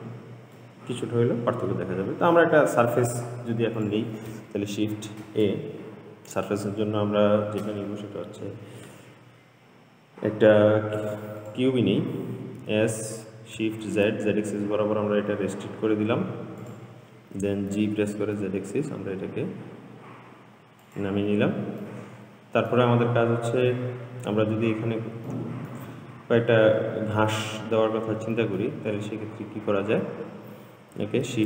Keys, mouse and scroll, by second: 1.3-2.1 scroll up 2, 2.1-2.6 scroll down 2, 2.6-4.0 middle drag, 4.0 click, 5.5 shift+a, 12.8 s, 18.0 g, 22.1-23.4 middle drag, 23.4-23.9 scroll up 3, 23.9-24.8 middle drag, 24.8-25.6 scroll down 3, 25.6-27.1 middle drag, 27.1-27.7 scroll up 3, 27.7-29.2 middle drag, 29.2-30.1 scroll up 2, 30.1-31.2 scroll up 1, 31.2 scroll up 1.